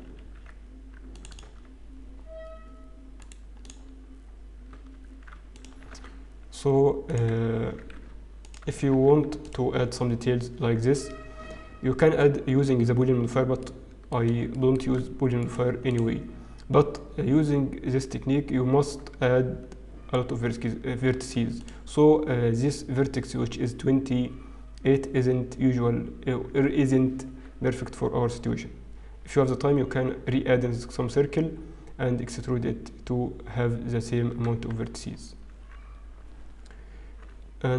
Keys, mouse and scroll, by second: 0.1 ctrl+r, 2.2 Tab, 2.2-2.8 scroll up 2, 2.8 scroll down 3, 6.8 Tab, 6.8 alt+click, 6.8-7.3 scroll up 1, 6.8 x, 8.4 alt+click, 8.9 x, 11.2 Tab, 13.2-13.7 scroll down 2, 14.3 middle click, 14.3-14.7 scroll down 1, 14.7 shift+middle click, 15.0-15.4 scroll up 2, 15.4 right click, 16.2 scroll up 2, 18.6-19.0 scroll down 1, 19.8 Tab, 21.6 alt+click, 34.4 Tab, 34.7-35.9 scroll down 7, 35.9-36.3 scroll up 3, 37.4-37.7 scroll up 3.